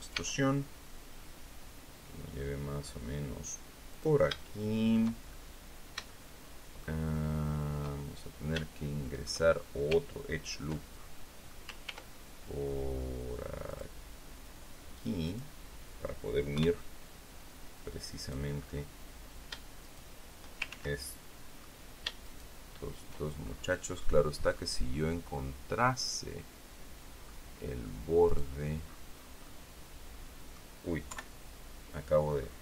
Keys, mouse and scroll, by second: 0.0 e, 3.8 click, 4.3 shift+middle click, 5.1-5.6 shift+scroll up 1, 6.0 shift+click, 7.0 shift+click, 8.5 shift+click, 10.6 ctrl+click, 11.7 ctrl+r, 13.6 click, 15.1 click, 16.4 KP_3, 18.1 right click, 18.5-19.1 scroll up 1, 19.7 shift+right click, 20.6 ctrl+shift+z, 20.9 ctrl+shift+click, 22.1 shift+right click, 23.3-23.9 shift+scroll up 1, 23.9 middle click, 24.7-25.0 scroll down 1, 25.2-27.3 middle drag, 28.2 right click, 28.7 scroll down 1, 29.3-30.6 middle drag, 31.0 KP_3, 32.2-32.6 scroll up 2.